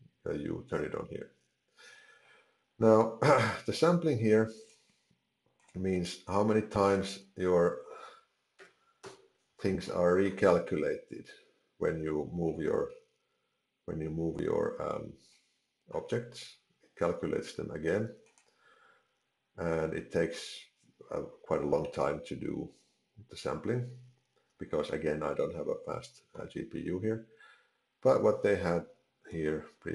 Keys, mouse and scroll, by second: 4.8 click, 6.9 click, 9.9 middle click, 12.5 middle click, 15.2 middle click, 18.3 click, 29.3 ctrl+z.